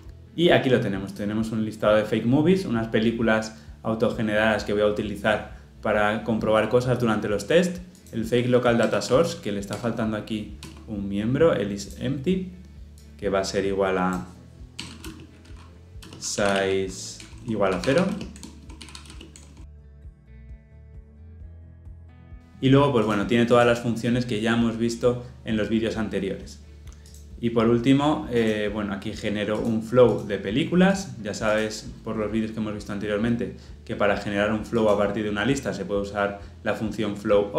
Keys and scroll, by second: 8.8 alt+Return, 17.2 Return, 21.3 ctrl+alt+l, 21.4 ctrl+alt+o.